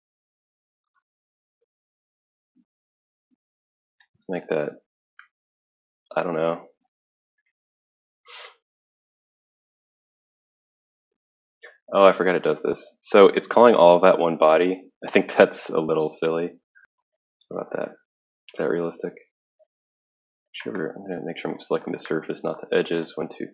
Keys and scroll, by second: 5.1 1.